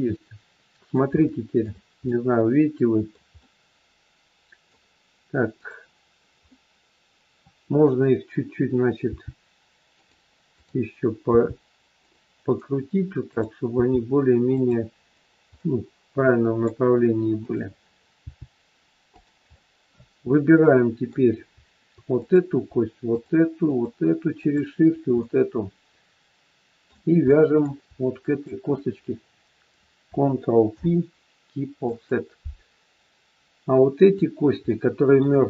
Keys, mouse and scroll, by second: 1.1 shift+middle click, 2.0 middle click, 3.4 middle click, 3.5 shift+middle click, 5.5 click, 6.5 middle click, 9.0 g, 10.5 click, 11.2 g, 13.1 click, 13.6 g, 15.5 middle click, 17.4 click, 18.1 g, 19.5 middle click, 22.2 click, 23.0 shift+click, 24.8 shift+click, 25.2 middle click, 27.2 middle click, 27.2 scroll up 1, 28.2 shift+click, 29.0-29.9 scroll down 3, 30.8 ctrl+p, 32.6-33.6 scroll down 2, 33.9 click, 34.6 middle click.